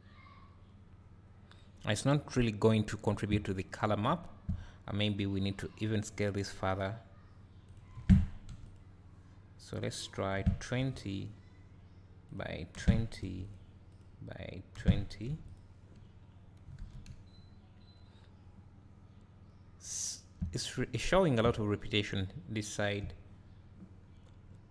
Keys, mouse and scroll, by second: 3.6-4.1 scroll up 1, 8.7 click, 11.0 click, 13.4 click, 15.5 click, 16.3 scroll down 1, 17.1 `, 21.9 scroll up 1, 22.3 `.